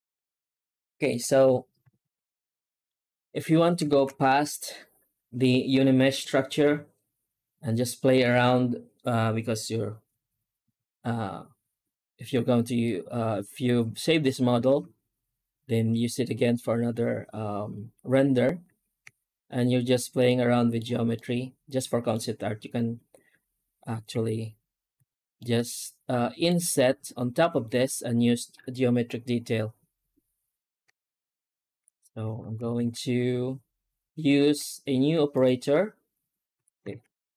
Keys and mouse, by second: 0.8 shift+middle drag, 1.7 ctrl+s, 2.4-2.7 middle drag, 3.0 right click, 3.4 Tab, 3.8 alt+shift+z, 12.7-13.8 middle drag, 18.6 Tab, 19.0 Tab, 20.1 middle click, 21.0 middle click, 24.0 alt+a, 24.8 a, 25.2-26.3 middle drag, 30.7 Tab, 31.7 Tab, 32.2 alt+a, 32.6 shift+q, 36.4 a, 36.8 shift+q.